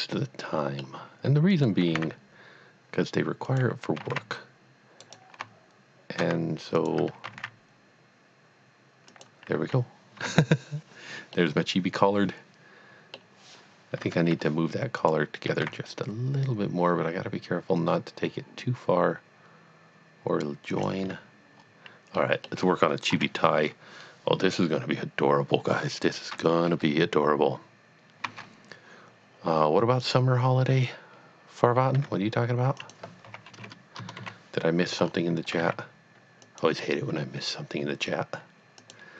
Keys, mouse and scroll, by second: 1.6 click, 1.9 typing, 3.5 click, 4.0 typing, 5.1 right click, 6.8 alt+click, 7.2 g, 7.4 z, 9.1 click, 10.5 Tab, 10.7 scroll down 1, 11.4 middle click, 11.6 middle click, 14.0 Tab, 14.3 scroll up 1, 15.0 click, 15.5 g, 15.6 x, 20.8 click, 21.2 Tab, 21.6-22.0 scroll down 1, 22.2 middle click, 23.3 KP_3, 28.2 shift+a, 30.0 click, 32.0 g, 32.8 click, 33.3 r, 33.6 KP_0, 34.0 KP_Enter, 34.3 KP_1, 35.0 scroll up 1, 35.6 g, 36.6 click, 38.9 click.